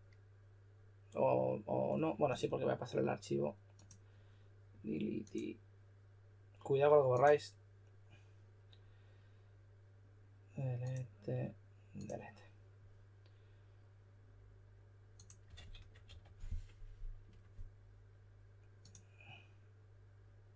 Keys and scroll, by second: 15.2-16.5 typing, 17.2 Return.